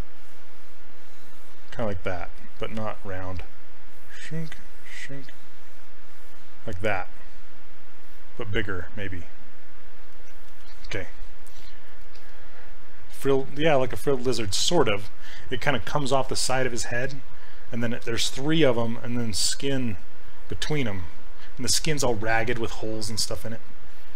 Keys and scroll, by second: 3.0 ctrl+z, 7.6 ctrl+shift+space, 10.5 ctrl+z.